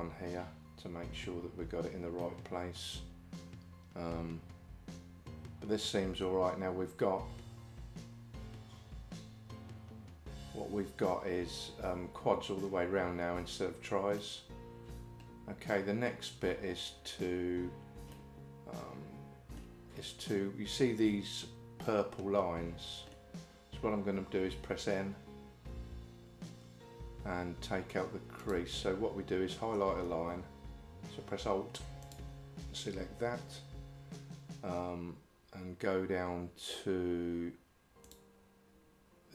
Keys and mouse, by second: 2.2-6.3 middle drag, 14.2-16.1 middle drag, 18.2-19.6 middle drag, 21.9-23.2 middle drag, 25.8 n, 28.4 click, 32.1 alt+click, 38.1 click.